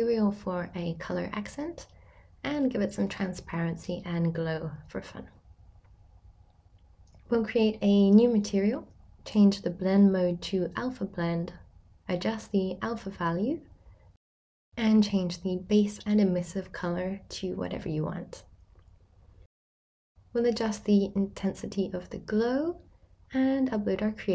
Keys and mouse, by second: 0.2 click, 0.5-3.9 shift+drag, 5.6-7.0 drag, 9.0-11.0 drag, 13.2 middle click, 13.4 shift+middle click, 13.8 middle click, 14.4 click, 14.7 middle drag, 15.0 Tab, 15.0-16.4 middle drag, 18.5-20.9 drag, 21.1 middle click, 21.8-24.3 middle drag, 23.0 Tab.